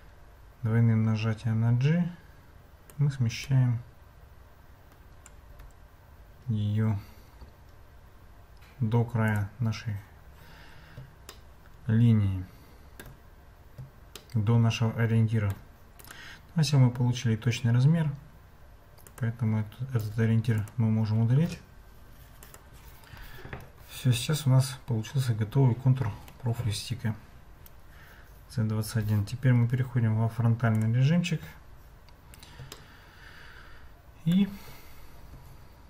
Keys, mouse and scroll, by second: 5.5 Tab, 9.3 click, 11.3-13.1 shift+middle drag, 14.2-14.6 shift+middle drag, 14.6-15.3 shift+drag, 15.3 shift+middle drag, 16.0 click, 19.0 click, 20.0-20.7 typing, 22.4 click, 32.7-33.1 shift+middle drag, 33.1 shift+click, 33.2 shift+middle click, 33.3 shift+click, 33.4 shift+middle click, 33.5 shift+click, 33.7 shift+middle click, 35.3 Tab.